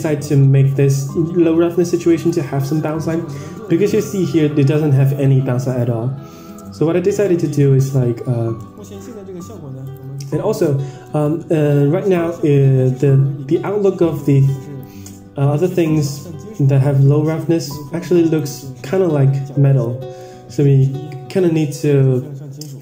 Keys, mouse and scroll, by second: 2.1 click, 3.2 middle drag, 3.7-5.0 scroll down 3, 6.6 drag, 7.0 middle click, 7.5-8.7 scroll down 19, 8.7 middle click, 9.9 click, 10.2 middle click, 10.7 scroll up 3, 11.0 middle click, 11.6 Tab, 13.6-14.8 drag, 15.0-15.8 middle drag, 17.0-18.3 drag, 18.8-19.9 middle drag, 20.2-20.8 middle drag, 21.3 KP_0.